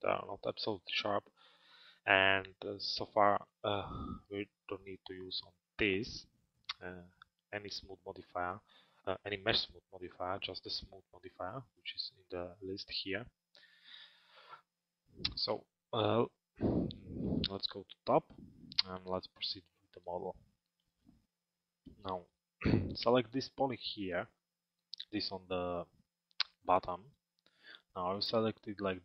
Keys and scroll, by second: 2.5 alt+x, 15.1 f.